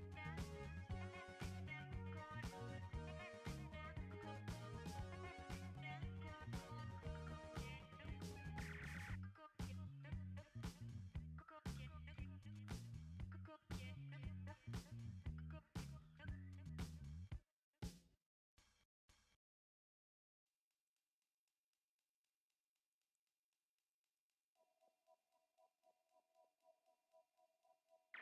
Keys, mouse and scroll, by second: 1.9 ctrl+t, 4.9-14.0 alt+drag, 18.9 typing, 20.2 click, 20.2 typing, 24.0 click.